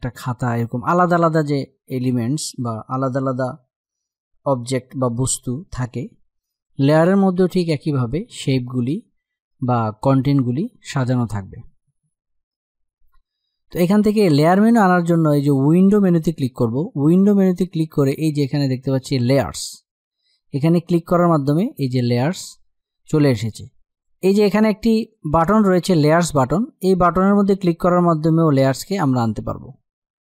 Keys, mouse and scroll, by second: 14.4 click, 19.8 click, 23.6 click.